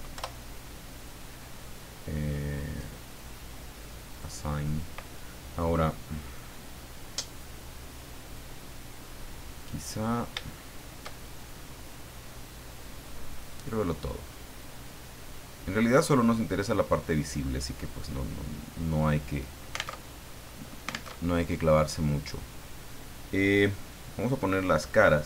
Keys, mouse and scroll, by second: 0.1 Return, 4.1 click, 8.9 middle click, 9.9-10.2 scroll up 1, 10.4 shift+middle click, 10.9 shift+scroll up 1, 13.3 click, 14.2-14.6 scroll up 2, 15.2 scroll down 2, 16.0-17.8 middle drag, 19.9 alt+Tab, 21.1 alt+Tab, 24.9 click.